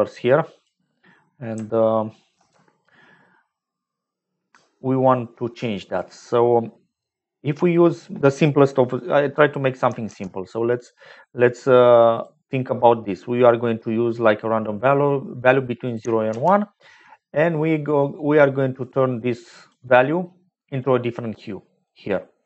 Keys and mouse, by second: 2.3 ctrl+z, 5.9 click, 10.0 shift+a, 12.1 click, 16.2 shift+a, 20.9 click.